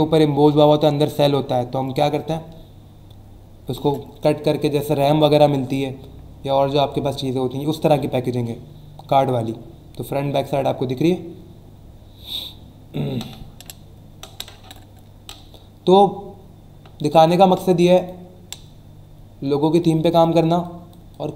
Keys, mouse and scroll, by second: 6.4 scroll down 1, 8.0 scroll down 1, 8.5 scroll down 1, 17.0 click, 17.6 click, 19.8 click.